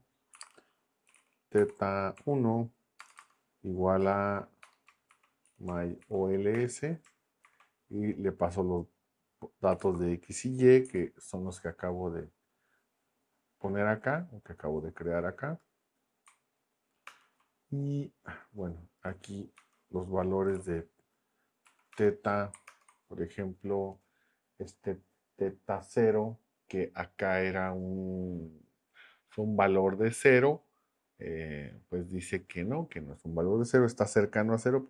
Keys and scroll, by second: 0.0-6.0 typing, 6.5 Return, 7.4 shift+9, 9.5-10.8 typing, 17.0 ctrl+Return, 19.5 Return, 20.2-21.0 typing, 21.6 Down, 21.9 Return, 22.7 ctrl+Return.